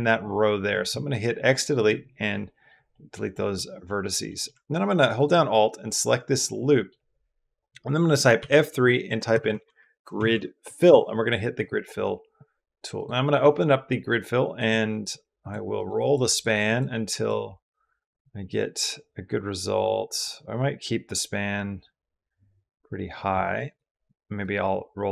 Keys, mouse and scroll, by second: 0.5 x, 1.7 typing, 2.1 middle click, 2.7 middle click, 3.1 middle click, 3.7 middle click, 4.1 middle click, 5.0 alt+click, 5.3-6.7 middle drag, 10.7 F3, 12.8 click, 14.9 click, 15.9 click, 16.2 click, 18.4 click, 22.4-24.2 drag, 24.4-25.1 drag.